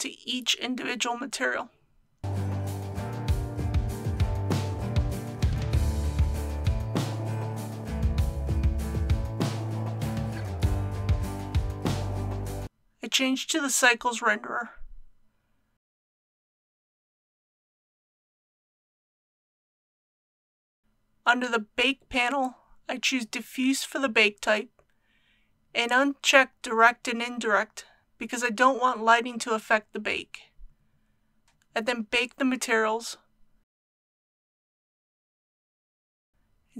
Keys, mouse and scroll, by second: 9.5 ctrl+v, 24.3 scroll down 1, 24.8 click.